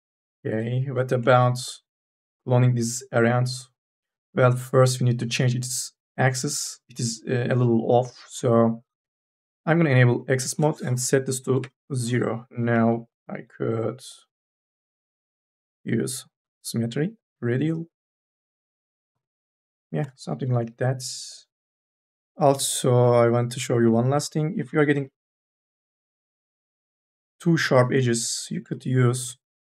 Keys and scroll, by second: 1.4 4, 11.3 KP_0, 11.5 Return, 21.6 n, 21.9 a, 22.0 b, 23.9 a, 24.1 q, 24.8 n, 25.1 b, 29.0 q.